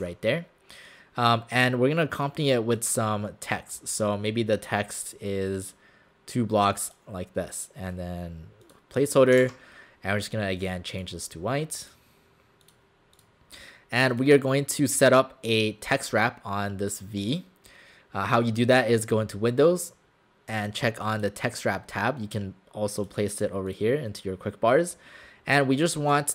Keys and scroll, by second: 0.0 w, 10.0 ctrl+a.